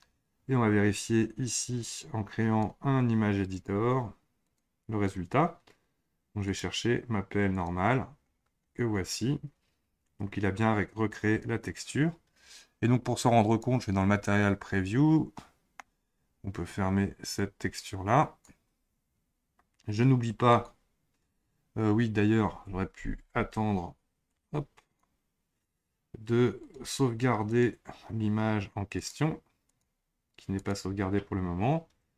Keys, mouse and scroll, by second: 1.8-8.3 drag, 8.3-11.8 scroll down 8, 13.7 click, 15.3-17.4 middle drag, 17.4-20.6 drag, 24.3-32.1 drag.